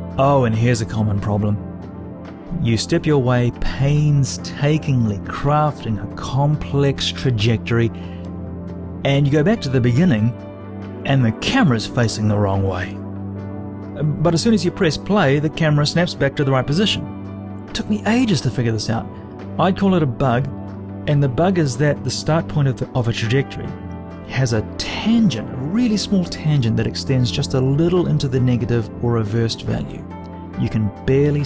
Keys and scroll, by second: 29.5 t, 31.0 t.